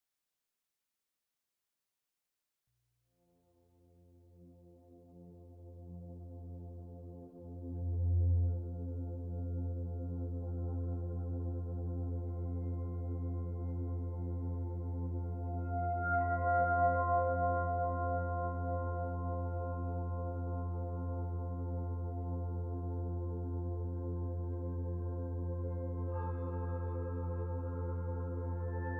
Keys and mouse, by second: 3.2 click, 5.3 middle click, 9.4-11.3 middle drag, 11.5 alt+z, 12.5 click, 15.2 w, 16.1-18.1 ctrl+shift+drag, 18.4 shift+click, 20.6 middle click, 22.3-23.6 middle drag, 23.6 ctrl+shift+click, 24.5 middle click, 26.0 alt+z, 26.6-28.9 middle drag.